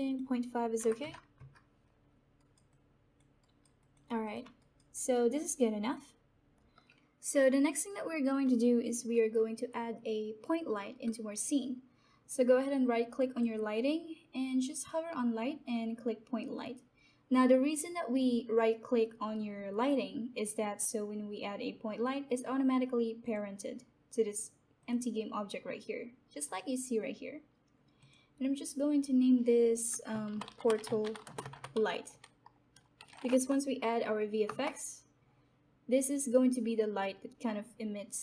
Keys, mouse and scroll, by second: 2.3 alt+right click, 2.9 alt+click, 3.4 alt+right click, 3.8 alt+click, 4.5 alt+right click, 5.1-6.7 alt+drag, 13.1 right click, 23.2 click, 30.0-33.5 typing, 35.2 Return.